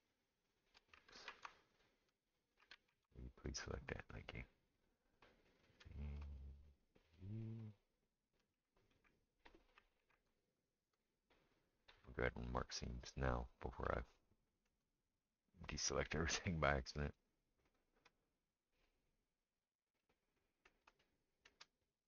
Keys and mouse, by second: 0.0 shift+middle click, 1.2 ctrl+z, 1.7 click, 1.7 middle click, 2.7 ctrl+z, 3.5 click, 3.5 middle click, 7.1 shift+click, 7.1 shift+middle click, 7.6 shift+click, 8.9 ctrl+a, 10.0 ctrl+z, 10.7 shift+click, 16.3 click, 16.3 middle click, 17.1 shift+click, 17.1 shift+middle click, 17.7 shift+click, 17.7 shift+middle click, 19.4-21.8 middle drag, 21.8-22.0 right drag.